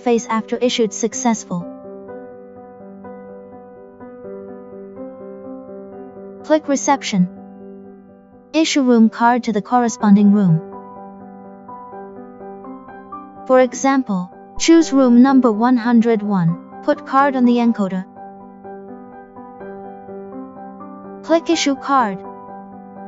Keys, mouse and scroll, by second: 1.7 click, 5.0 click, 7.5 click, 16.2 click, 21.1 click, 22.9 click.